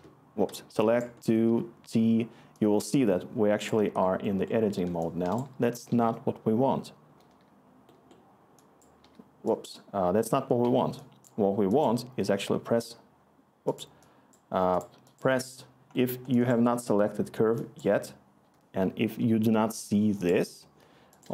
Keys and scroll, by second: 0.0-1.4 typing, 5.9 Delete, 9.0 Delete, 10.7 Delete, 12.3 Return, 12.8 Return.